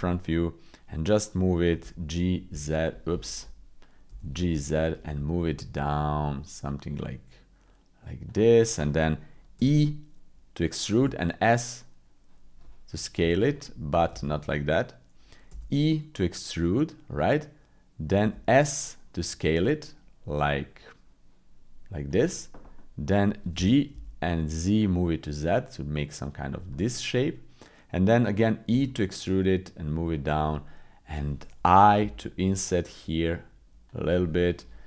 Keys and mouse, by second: 1.8 f, 2.3 z, 4.1 g, 9.6 e, 13.5 click, 14.1 ctrl+z, 14.8 click, 15.5 e, 22.8 click, 23.5 g, 26.7-27.8 drag, 28.6 e, 30.6 click, 32.0 i, 34.2 click.